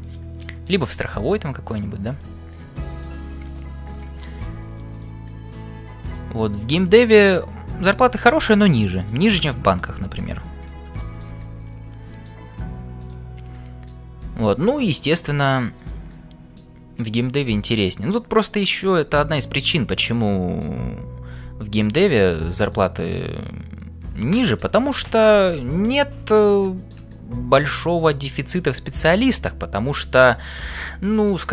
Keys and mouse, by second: 0.2 middle click, 0.9 click, 1.6 middle click, 2.2 f, 2.7 middle click, 4.3 g, 5.4-6.4 middle drag, 11.1 shift+middle click, 11.5-12.5 middle drag, 13.7 middle click, 14.2 f, 14.7 middle click, 15.8 click, 16.2 middle click, 17.2 g, 18.0 middle click, 19.7 click, 20.2 middle click, 21.2 g, 23.0-24.8 middle drag, 26.6 shift+middle click, 27.1-31.2 middle drag.